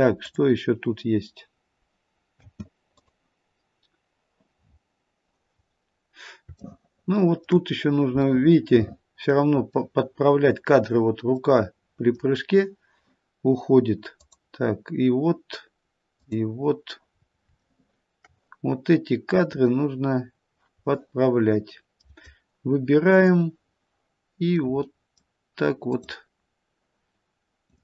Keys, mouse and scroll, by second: 0.3 click, 2.3 space, 2.9 click, 4.6-5.4 scroll up 4, 5.4 scroll up 1, 5.6-5.9 scroll down 2, 6.7 shift+middle click, 7.7-8.3 scroll up 1, 8.3 middle click, 8.3-8.8 scroll up 1, 9.6 scroll up 1, 9.8 middle click, 10.6 middle click, 11.6 middle click, 14.2 click, 16.2 click, 17.2-17.7 scroll down 2, 17.7 shift+middle click, 19.5 click, 20.9 middle click, 23.1 click, 23.6-23.9 scroll up 1, 24.6 middle click, 25.8 click, 27.7 click.